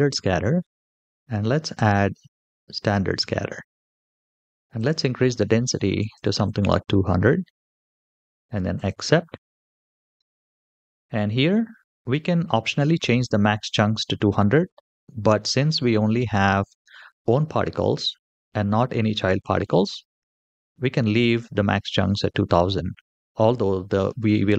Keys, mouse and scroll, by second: 2.6 click, 4.6-6.2 drag, 5.9 KP_0, 7.3 scroll down 3, 8.5 click, 10.4-11.6 scroll down 3, 16.0-16.5 middle drag, 17.4-17.9 middle drag, 18.8-19.2 scroll up 2, 19.2 scroll down 1.